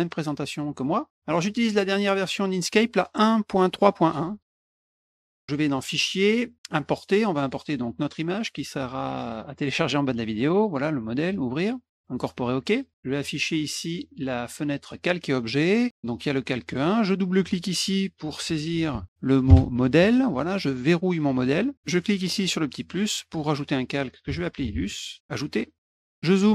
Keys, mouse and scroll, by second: 0.4 click, 1.6 click, 2.3 click, 5.7 click, 6.6 click, 9.6 click, 11.3 click, 12.0 click, 13.2 click, 14.8 click, 15.9 click, 16.7 click, 16.8 click, 17.9-19.5 typing, 21.4 click, 22.9 click, 24.0-25.4 typing, 25.9 click.